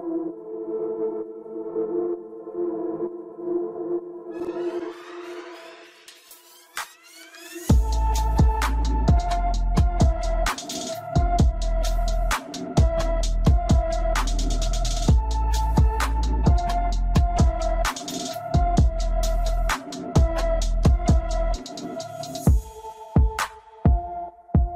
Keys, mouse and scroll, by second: 1.0 KP_7, 3.7 click, 5.8 click, 6.5 click, 8.3 click, 11.1 click, 11.7 click, 19.7 click, 22.8 click, 23.9-24.7 middle drag.